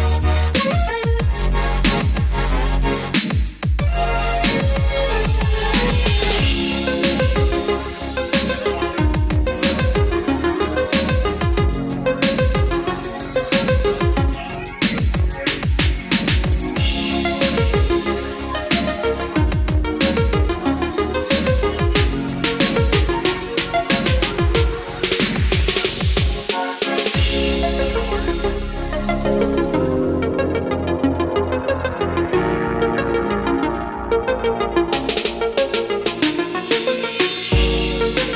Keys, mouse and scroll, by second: 1.5 click, 2.4 scroll up 1, 3.0 scroll down 1, 4.8 click, 6.5-8.3 scroll up 1, 8.9-16.7 drag, 19.1 KP_3, 22.5-29.9 drag, 33.1 Delete, 34.1-38.3 drag.